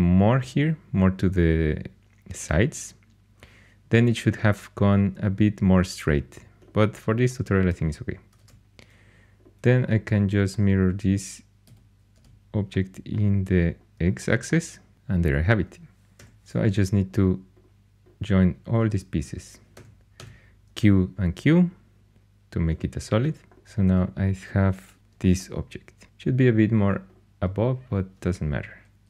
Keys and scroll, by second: 8.3 alt+x, 11.6-12.1 typing, 16.2 4, 19.7-20.1 typing, 24.9 alt+h.